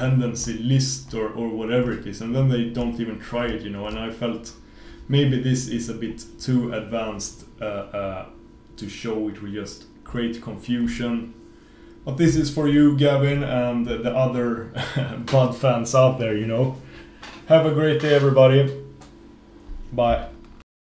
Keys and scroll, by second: 20.8 super+Print.